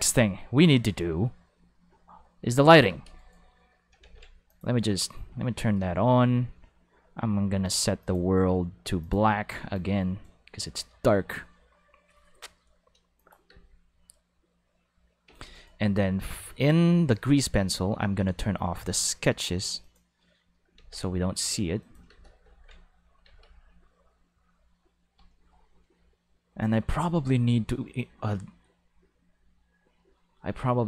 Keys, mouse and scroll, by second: 2.9 space, 3.0 5, 3.2 right click, 4.5 click, 7.6 click, 8.0 click, 9.0 click, 9.7 click, 13.2 click, 13.5 space, 13.6 5, 15.3 space, 15.4 5, 15.5 right click, 17.1 click, 19.8 click, 20.8 ctrl+5, 21.8 click, 22.1 space, 22.2 5, 22.6 ctrl+Tab, 23.2 alt+a, 23.4 5.